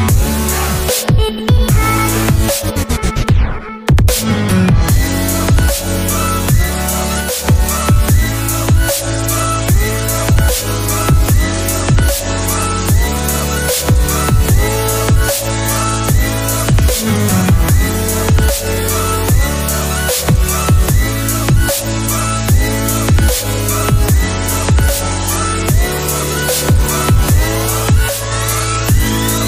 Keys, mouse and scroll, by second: 7.2 Escape, 8.7 double click, 9.1 typing, 9.2 Return, 11.6 double click, 22.5 middle click, 22.6 right click, 28.0 alt+Tab.